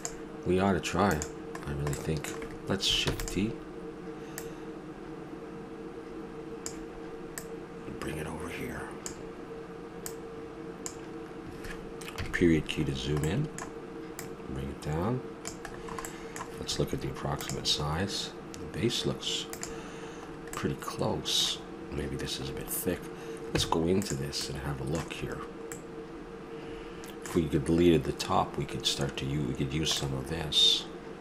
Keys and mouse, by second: 3.0 shift+d, 4.4-5.8 drag, 7.4-9.9 drag, 10.0-10.5 drag, 12.1 KP_Decimal, 13.2-14.1 middle drag, 14.1-15.3 drag, 20.2-23.5 middle drag, 23.5 Tab, 27.1 middle click, 27.6-30.0 middle drag.